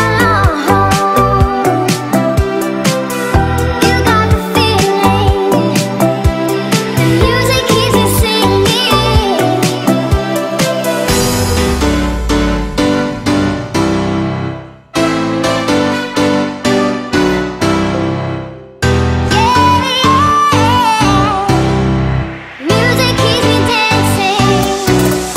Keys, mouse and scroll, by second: 0.3-1.6 typing, 2.3 scroll up 1, 2.8 shift+middle click, 3.2-4.6 scroll down 1, 4.6-6.1 drag, 6.1 m, 6.8 ctrl+click, 8.0 Up, 9.4 click, 10.3-11.4 typing, 11.0 Return, 12.6 click, 13.0 ctrl+click, 15.1 ctrl+x, 16.3 click, 17.0 right click, 17.6 click, 20.9-21.7 scroll up 1, 21.7 click, 22.6 scroll down 1, 23.3 scroll up 1, 23.8 click, 24.3 scroll down 1.